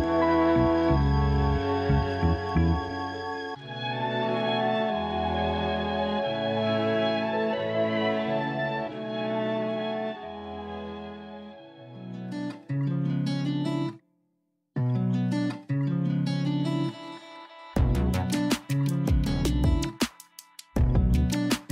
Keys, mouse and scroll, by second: 0.2 Tab, 1.6-4.6 middle drag, 5.9 ctrl+r, 8.1 ctrl+z, 8.6 a, 8.8 a, 9.3-9.8 scroll up 1, 9.8 3, 10.3 click, 11.8 i, 14.8 a, 15.0 a, 15.3 Tab, 15.5-16.0 scroll down 7, 16.0 a, 16.2 a, 16.8-17.3 middle drag, 17.3-17.8 scroll down 1, 17.8-18.3 shift+middle drag, 18.3-18.8 scroll up 4, 18.8-19.5 middle drag, 19.5-20.2 scroll down 2, 20.2 KP_Divide, 20.6 a, 20.8 a, 21.2 KP_1.